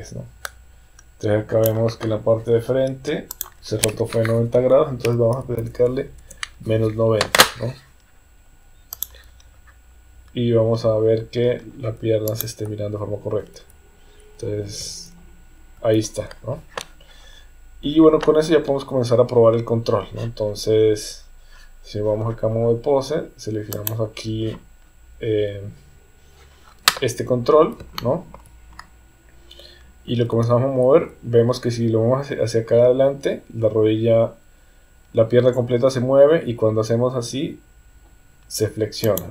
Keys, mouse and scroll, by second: 3.4-7.4 drag, 9.0 click, 12.2 click, 13.4 KP_3, 14.8 KP_1, 23.8 click, 27.9 shift+middle click, 30.3 g.